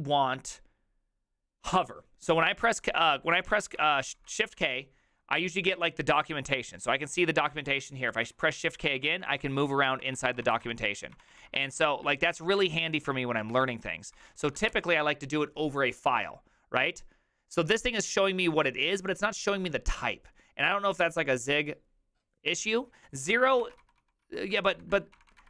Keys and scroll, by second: 2.5-4.9 typing, 8.2 shift+k, 8.8 ctrl+d, 8.9 ctrl+d, 9.1 ctrl+d, 9.3 ctrl+d, 9.4 ctrl+u, 9.5 ctrl+u, 9.7 ctrl+u, 10.4-15.2 typing, 23.5-25.4 typing.